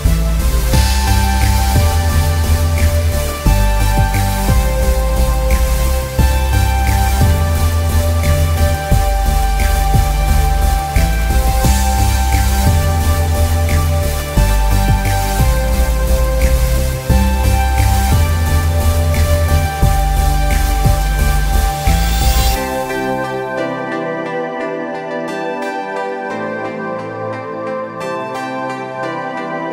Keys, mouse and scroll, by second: 0.8 click, 1.0 ctrl+z, 1.2 click, 1.4 space, 1.7 click, 1.8 ctrl+z, 1.9 click, 2.9 click, 3.5 space, 3.7 click, 4.4 z, 4.6 click, 5.5 click, 6.8 space, 7.1 click, 9.0 click, 9.9 alt+scroll down 1, 10.0 click, 10.1 alt+scroll up 1, 10.3 click, 11.2 click, 12.1 click, 12.9 click, 14.5 click, 14.8 click, 15.3 click, 15.5 space, 15.7 click, 16.3 click, 16.9 click, 17.2 space, 17.3 scroll up 1, 17.5 click, 18.8 space, 19.0 click, 19.9 alt+scroll down 1, 20.1 alt+scroll up 1, 20.2 scroll down 1, 20.3 click, 21.6 space, 21.8 click, 22.3 alt+scroll up 1, 22.5 click, 23.7 space, 23.9 click, 24.4 space, 24.6 click, 25.0 alt+scroll down 2, 25.4 scroll up 1, 25.9-26.8 scroll down 4, 26.1 click, 26.2 space, 27.1 click, 27.3 alt+scroll down 1, 27.4 space, 27.6 click, 28.3 click, 28.5 alt+scroll up 1, 28.6 alt+scroll down 1, 28.7-29.0 scroll up 2, 28.8 click, 29.0 space.